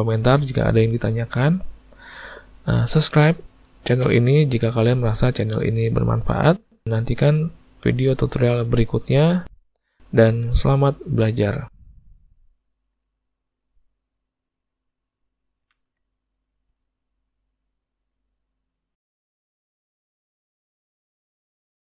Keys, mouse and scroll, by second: 2.3 middle click, 2.7 alt+a, 3.2 shift+middle click, 3.5 middle click, 4.1 middle click, 4.8 middle click, 5.0 shift+middle click, 5.8 ctrl+middle click, 7.6 middle click, 8.2 ctrl+middle click, 9.1 shift+middle click, 10.5 middle click, 11.9 shift+middle click, 12.3 middle click, 13.5 middle click, 14.2 shift+middle click, 15.0 middle click, 16.4 middle click, 17.0 middle click, 18.5 middle click, 19.2 middle click, 20.0 middle click, 20.8-21.1 shift+middle click.